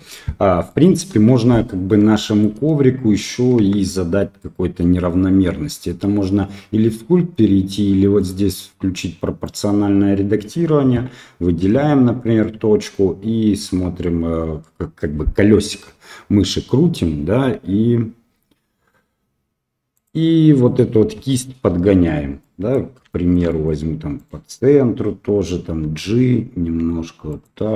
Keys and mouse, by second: 0.6 middle drag, 1.1 KP_1, 2.1 shift+middle click, 3.6 Tab, 8.1 click, 9.4 right click, 11.6 g, 22.4 middle click, 23.1 shift+middle click, 23.4 middle click, 24.2 right click.